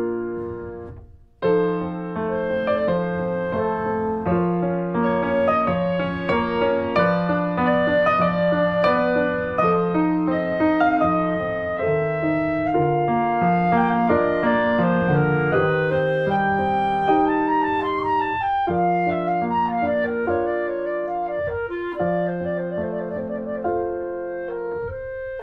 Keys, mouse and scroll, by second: 0.0 click, 2.1 click, 2.3 scroll down 2, 2.4-3.8 middle drag, 3.8 click, 4.1 middle click, 4.8 alt+z, 5.0 scroll up 1, 5.3 shift+middle click, 6.1 click, 6.3 Tab, 6.6 click, 6.8 scroll down 1, 7.1 shift+middle click, 7.6 s, 15.0 middle click, 15.4 Tab, 15.5 click, 15.6 scroll down 1, 15.8 click, 16.1 middle click, 16.8 click, 17.5 alt+middle click, 17.7-18.2 alt+scroll up 3, 18.2 shift+middle click, 18.7-19.7 drag, 19.7 alt+middle click, 20.4 click, 20.9 alt+middle click, 21.8 scroll down 2, 22.1 middle click, 22.5 click, 22.6 scroll down 1, 22.8-23.8 middle drag, 23.8 click, 23.9 shift+middle click, 24.4 Tab, 24.6 Tab, 24.9 click, 25.2 Tab.